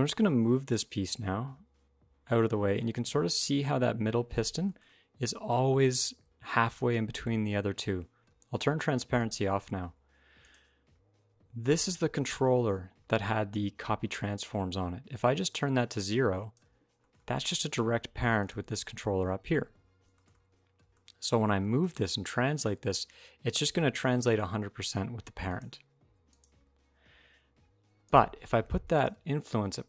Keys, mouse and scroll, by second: 0.2 g, 4.4 shift+middle click, 4.6 middle click, 5.7 alt+z, 9.0 click, 10.2 click, 15.3 click, 16.8 shift+middle click, 16.9 middle click, 18.2 click, 18.6 shift+middle click, 19.1 middle click, 19.4 alt+r, 19.5 alt+g, 19.9 shift+middle click, 20.1 middle click, 20.8-21.2 scroll down 1, 21.4 g, 26.0 click, 27.8 click, 28.7 click.